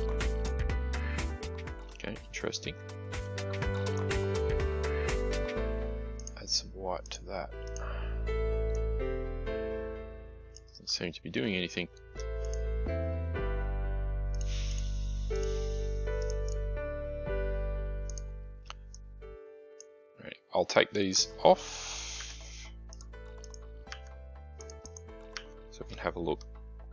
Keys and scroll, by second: 22.1 Delete.